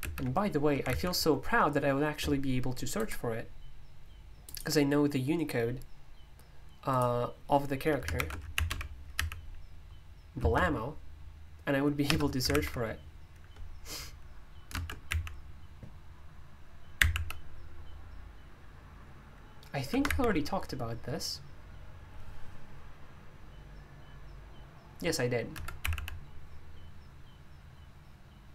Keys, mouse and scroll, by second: 0.0 super+m, 0.8 super+,, 2.9-8.0 drag, 8.1 ctrl+u, 8.3-12.5 typing, 14.5-15.2 typing, 16.9 typing, 25.5 Escape, 25.8 d, 25.9 d.